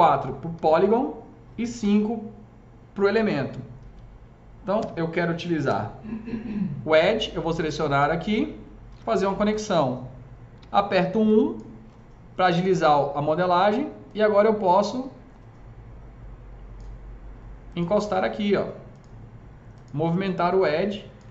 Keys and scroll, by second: 0.6 4, 5.5 2, 8.8 ctrl+shift+e, 10.4 1, 14.6 s.